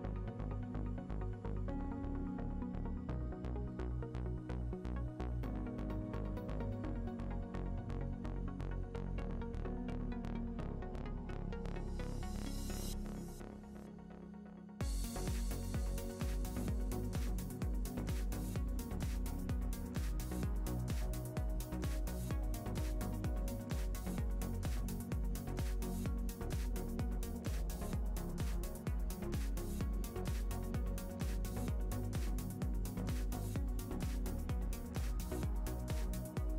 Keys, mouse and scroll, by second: 2.0 click, 4.4 click, 4.9 shift+middle click, 5.1 scroll up 2, 5.6 click, 7.9 shift+middle click, 8.2 click, 10.2 shift+click, 10.8 click, 13.3 click, 13.3 scroll down 1, 16.4 shift+middle click, 16.5-16.8 scroll up 1, 16.8 click, 17.5 click, 21.5 middle click, 21.8 click, 22.3-23.4 middle drag, 23.4-28.1 drag, 28.1-28.4 scroll down 2, 28.4 scroll up 2, 28.6 shift+middle click, 28.9 click, 32.2-32.6 scroll down 1, 32.6 scroll up 1, 32.9 click, 35.7 scroll down 1, 35.9 click, 36.1 middle click.